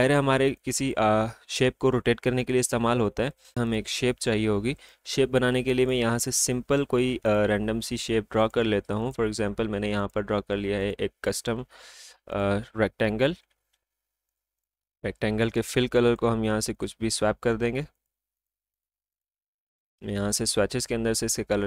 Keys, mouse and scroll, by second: 0.7 click, 0.8 space, 3.5 right click, 3.9-7.2 drag, 13.7 ctrl+z, 14.1 click.